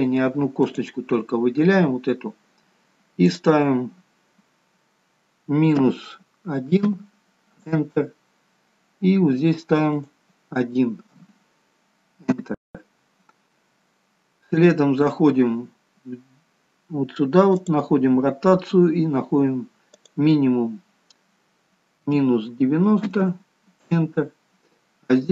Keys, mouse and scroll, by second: 1.0 click, 10.4 click, 14.2-15.1 scroll down 1, 15.1-17.8 scroll down 2, 17.8 click, 18.5-20.2 scroll down 1, 20.2 click, 20.2-20.8 scroll down 1.